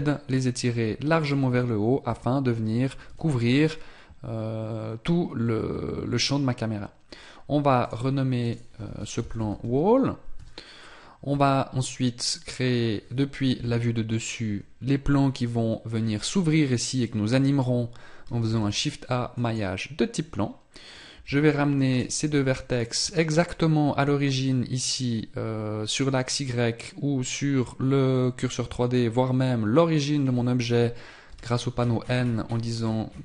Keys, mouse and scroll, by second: 2.0 Tab, 7.8 click, 9.7 l, 13.5 KP_7, 14.8-16.7 scroll down 1, 21.1 Tab, 21.8 right click, 22.6 shift+right click, 31.2 n, 31.8-33.2 scroll up 1.